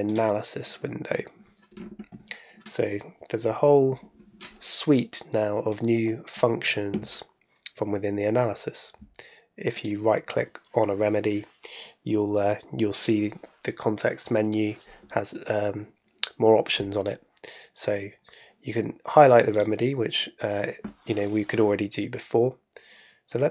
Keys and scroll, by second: 3.9 super+F2.